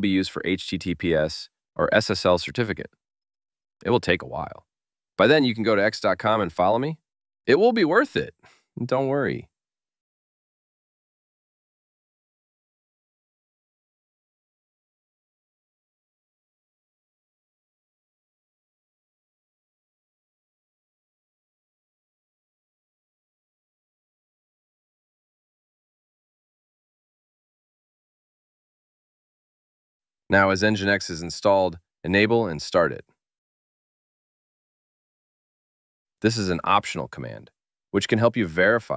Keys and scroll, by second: 30.9 super+v.